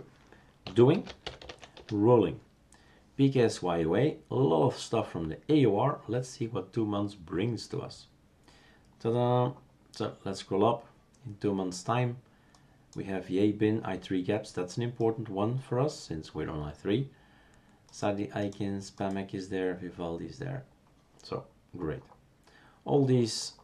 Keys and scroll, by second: 0.6 typing, 1.7 Return, 1.7 typing.